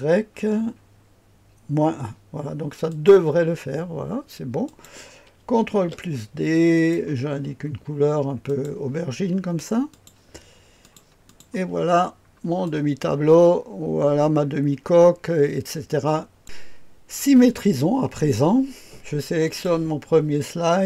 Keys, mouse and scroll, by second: 2.9 click, 4.6 click, 5.7 ctrl+d, 6.7 click, 8.4 click, 9.9 click, 10.8-11.9 drag, 11.9-12.6 scroll down 1, 12.6-16.4 drag, 19.4 click.